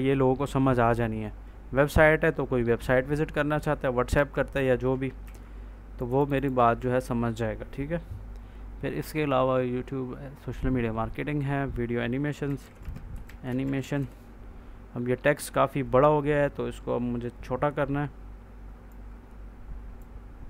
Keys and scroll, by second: 4.0 F4, 5.1 ctrl+s, 6.7 ctrl+a, 12.1-14.4 typing.